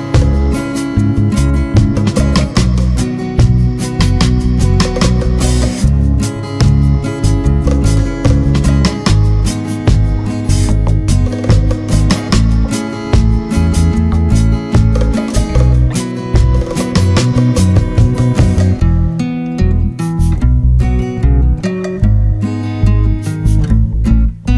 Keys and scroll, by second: 0.6 ctrl+z, 9.1 ctrl+-, 16.3 ctrl+z, 21.5 ctrl+z.